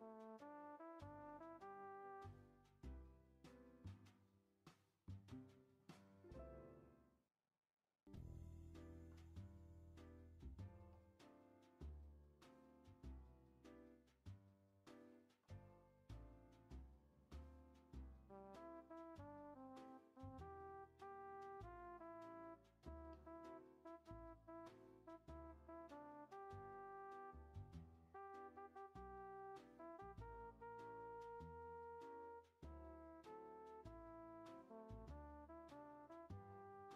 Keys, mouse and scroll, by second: 0.7 click, 1.1 ctrl+a, 6.2 click, 6.7 click, 7.1 e, 8.4 click, 8.9 ctrl+a, 10.3 click, 10.7 ctrl+a, 13.4 shift+middle click, 13.7 scroll up 2, 14.4 click, 14.7 scroll down 2, 15.2 ctrl+a, 17.1 e, 20.5 scroll down 2, 20.6-22.7 middle drag, 22.7 e, 24.6 Tab, 25.5 alt+z, 25.8-26.6 middle drag, 26.6 alt+z, 26.9 scroll up 1, 27.0-28.0 middle drag, 28.0-28.4 scroll up 4, 28.4 Tab, 29.0 shift+scroll up 1, 29.0 shift+middle drag, 29.2 shift+scroll down 1, 29.6 middle click, 29.9 scroll down 2, 30.1 shift+middle click, 30.8 click, 31.1-31.4 shift+middle drag, 31.4 e, 34.1 scroll down 2, 34.6-36.7 shift+middle drag, 36.7 click.